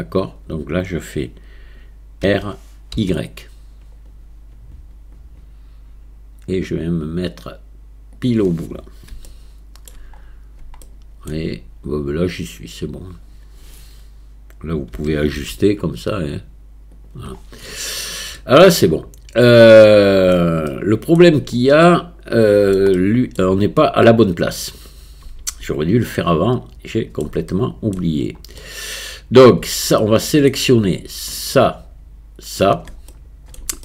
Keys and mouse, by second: 2.2 r, 9.2-9.9 shift+middle drag, 10.8-11.3 shift+middle drag, 15.0 r, 18.4-20.4 middle drag, 20.7-21.2 shift+drag, 21.9 middle click, 23.0-23.4 shift+drag, 26.2-27.3 middle drag, 27.5-28.0 shift+middle drag, 28.6-29.7 middle drag, 30.0-30.5 shift+middle drag, 31.4 shift+click, 32.5 shift+click, 33.1-33.6 middle drag.